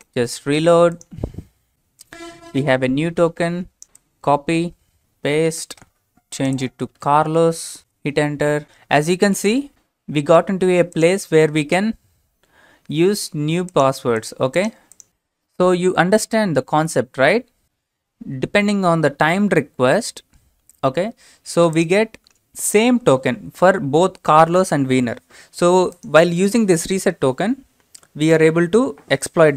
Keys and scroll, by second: 5.0 ctrl+c, 5.2 ctrl+v, 6.7-8.3 typing, 16.9 alt+Tab.